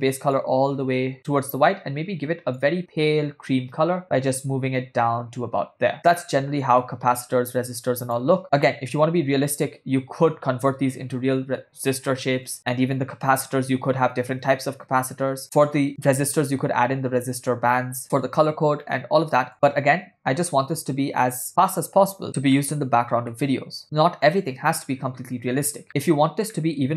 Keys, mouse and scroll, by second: 8.8-10.2 shift+middle drag, 12.2-12.8 ctrl+middle drag, 19.0-19.5 shift+middle drag, 22.6 middle click, 23.4-23.8 shift+middle drag, 25.9 ctrl+middle click, 26.6-26.9 shift+middle drag.